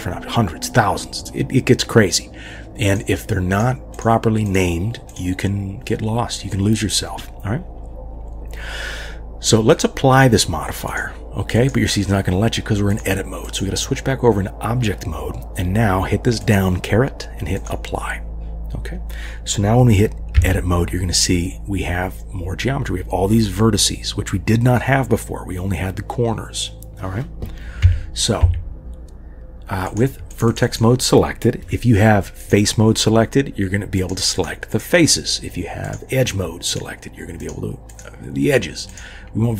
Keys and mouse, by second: 3.5 click, 5.1 click, 9.8-11.3 drag, 11.6 click, 12.9-13.6 drag, 16.4-17.7 drag, 20.4 Tab, 27.8 Tab, 28.4 Tab, 29.8 click, 30.3 click, 30.5 click, 32.4 click, 37.9 click.